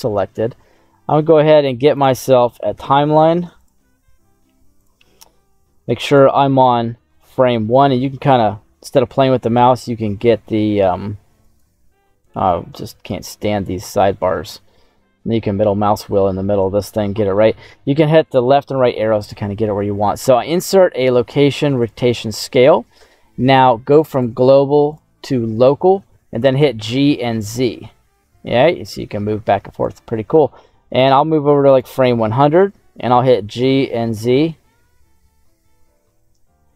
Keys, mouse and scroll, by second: 1.2-2.6 right drag, 4.8 click, 6.0 click, 8.3 Left, 11.4 click, 12.4 click, 13.9 click, 14.8-16.2 scroll down 3, 18.1 Right, 20.2 i, 24.0-25.4 drag, 26.3 g, 26.8 z, 29.7 right click, 31.6 click, 33.0 g, 33.5 z.